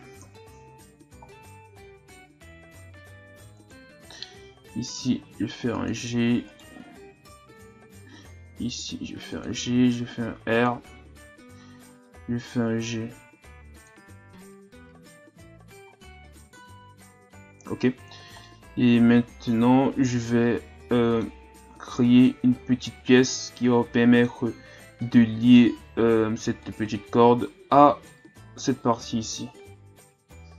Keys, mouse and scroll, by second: 0.2 KP_3, 1.0 ctrl+scroll down 1, 1.2-2.7 scroll up 2, 3.6 alt+right click, 4.5 g, 6.5 alt+right click, 8.3 g, 9.6 r, 12.2 g, 14.2 Tab, 14.6 a, 14.9-15.8 scroll down 3, 15.8-17.4 scroll up 6, 17.9-18.4 ctrl+scroll down 2, 18.4-21.4 middle drag, 21.6 Tab, 22.2-26.6 middle drag, 26.6-29.0 drag, 29.0 KP_1.